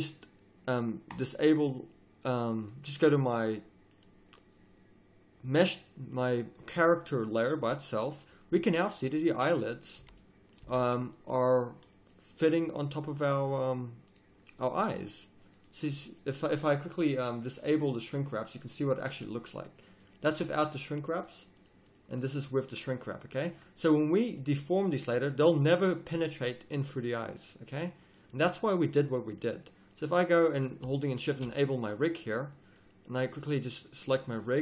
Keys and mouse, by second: 1.1-3.6 drag, 3.6 middle click, 3.8-5.3 drag, 9.6 middle click, 9.9-10.9 middle drag, 10.0 z, 10.6 z, 19.4-19.8 drag, 19.8-22.8 middle drag, 22.8-24.0 drag, 24.0 middle drag, 24.2 middle click, 27.8 middle click, 28.1 middle click, 31.2-31.8 drag, 31.8-32.2 middle drag, 32.2-33.2 drag, 33.4-34.4 drag.